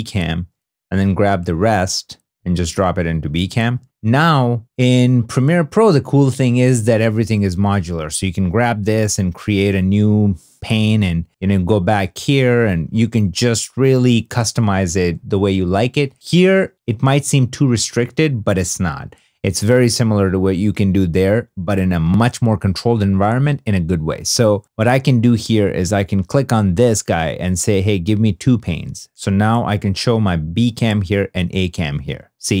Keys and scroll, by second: 0.0-0.1 typing, 5.4 super+Tab, 15.0 super+Tab.